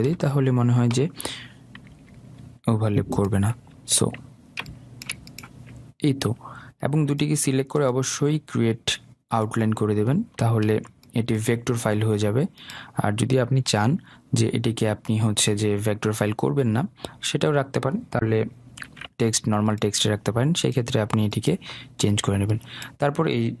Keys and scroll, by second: 0.3 Return, 2.1 Right, 19.1 ctrl+z.